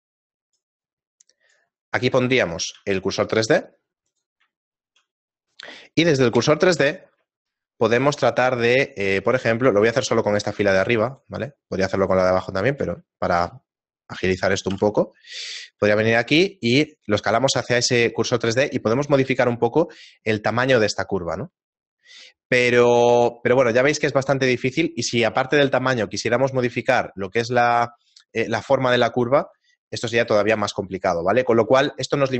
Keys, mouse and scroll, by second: 2.2 middle click, 3.1 shift+s, 4.6 shift+middle click, 6.3 ., 7.5 shift+middle click, 8.9 right click, 9.5 shift+right click, 9.7 right click, 11.1 alt+right click, 12.0 right click, 12.6 ctrl+right click, 13.1 shift+middle click, 14.7 KP_7, 15.9 scroll up 3, 16.5 scroll up 3, 16.7 s, 23.4 shift+middle click, 23.9-26.7 scroll down 7, 30.1 right click, 30.5 x, 31.8 shift+middle click.